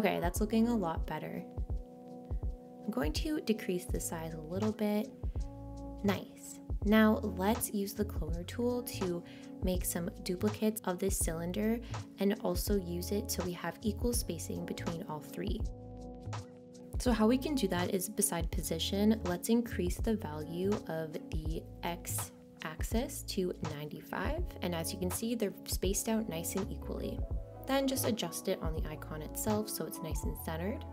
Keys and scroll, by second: 27.1 9, 27.7 5, 28.1 Return.